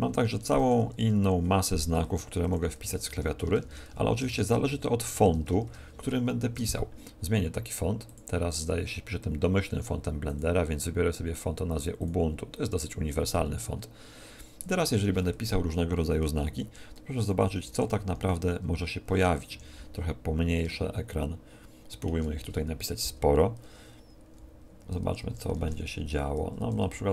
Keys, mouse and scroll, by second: 0.2-5.6 typing, 6.4 Tab, 8.0-10.0 drag, 10.2-12.2 drag, 14.6-16.6 middle drag, 15.3 Tab, 16.4-18.2 typing, 19.4 Escape, 19.9-22.5 middle drag, 24.9-27.1 typing.